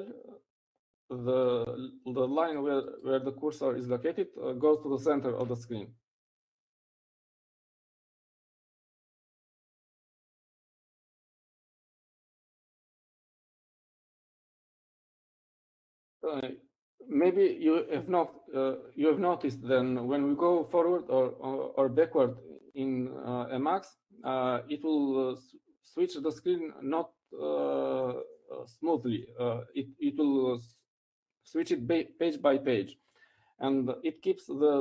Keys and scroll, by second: 15.9 ctrl+n, 16.6 ctrl+n.